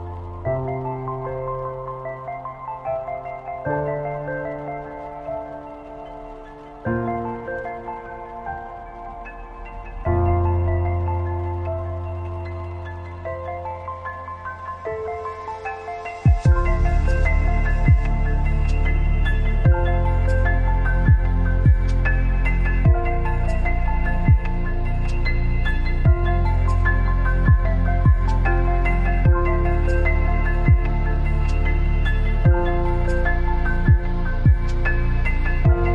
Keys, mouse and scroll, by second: 1.4 click, 4.0 click, 7.7 alt+scroll down 1, 8.7 space, 8.8 click, 9.2 space, 10.8-17.9 drag, 22.2 ctrl+a, 24.1 click, 26.0 scroll down 1, 32.2-35.9 drag.